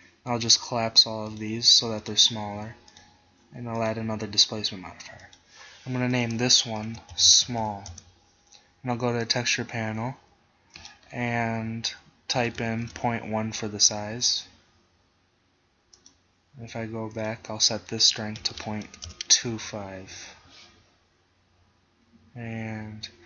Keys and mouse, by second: 5.3-7.9 drag, 7.7 l, 8.0-9.3 middle drag, 9.3-12.5 drag, 12.7-16.0 middle drag, 16.0-19.0 drag, 21.8 middle click.